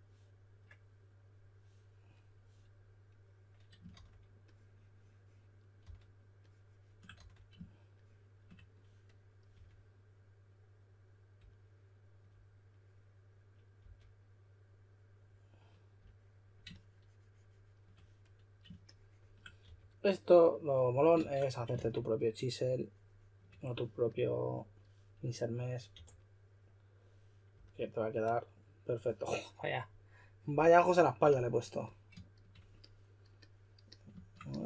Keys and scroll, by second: 3.9 typing, 5.8 typing, 7.1 d, 9.5 4, 13.8 d, 19.6 4, 21.7 shift+d, 25.9 4.